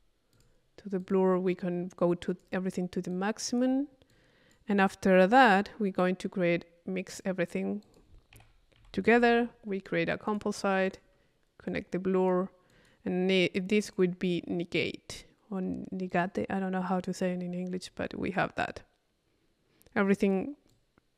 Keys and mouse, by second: 0.3 click, 1.0 click, 2.0 click, 3.1-4.3 drag, 7.1 right click, 7.8 click, 8.3 c, 10.3-11.3 drag, 11.7-13.3 drag, 13.8 click, 16.1 click, 16.5 click, 16.9 click, 17.8 click, 18.7 click.